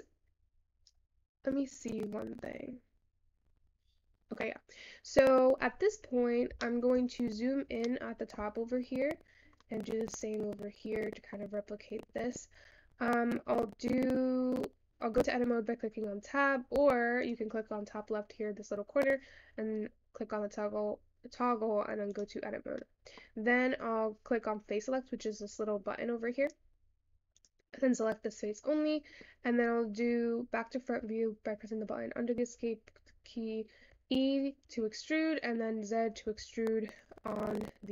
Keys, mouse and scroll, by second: 14.3 scroll down 2, 16.6 Tab, 17.2 Tab, 17.2-20.3 drag, 22.8 middle click, 23.3-24.4 scroll down 1, 26.5 click, 27.3 click, 28.5-37.9 middle drag.